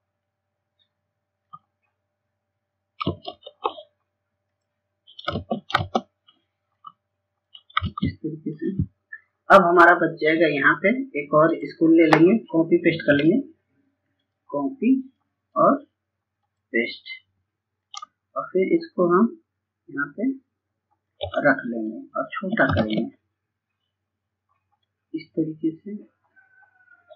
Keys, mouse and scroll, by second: 3.8 click, 4.7 ctrl+space, 6.1 click, 7.2 ctrl+space, 8.2-20.9 drag, 22.2 ctrl+space, 22.6-23.0 scroll down 1, 23.1-24.2 scroll up 1, 24.2-26.7 drag, 26.7-27.1 scroll up 1.